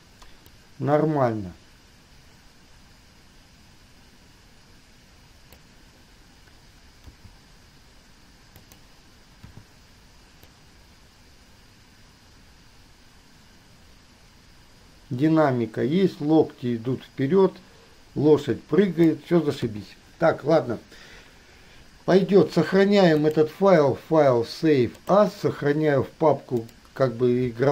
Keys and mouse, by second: 0.7-5.8 drag, 7.2 g, 9.7 i, 19.8 KP_3, 23.4-25.4 drag.